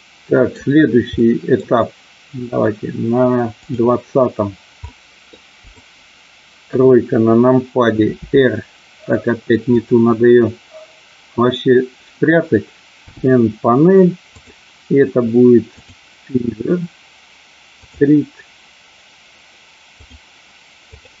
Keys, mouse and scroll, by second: 1.2 middle click, 3.6 click, 4.8 middle click, 6.7 KP_3, 8.1 r, 13.0 n, 14.3-16.0 drag, 17.8 click, 20.0 click, 20.8 click.